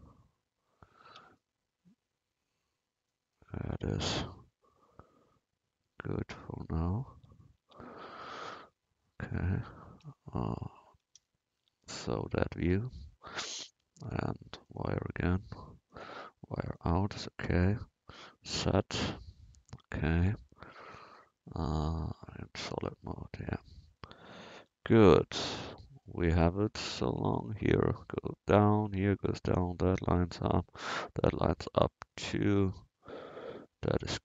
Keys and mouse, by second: 1.1 Tab, 7.2 Tab, 7.6 Tab, 8.7 KP_7, 10.1 KP_1, 11.7 Tab, 14.0-18.5 drag, 18.5 z, 24.6 Tab.